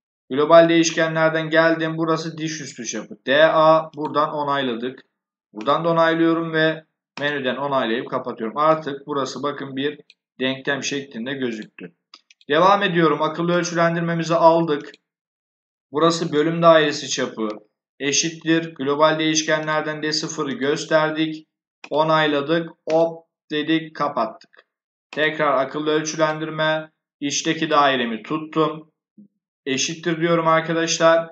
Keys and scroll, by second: 16.7 shift+0, 29.5 shift+0.